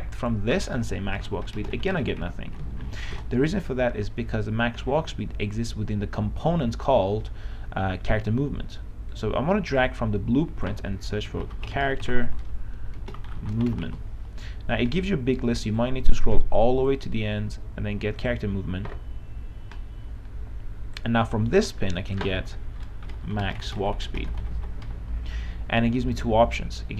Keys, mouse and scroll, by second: 1.2-2.9 typing, 3.3 ctrl+BackSpace, 9.3-11.3 drag, 11.3-14.5 typing, 16.0-21.4 drag, 23.0-25.2 typing.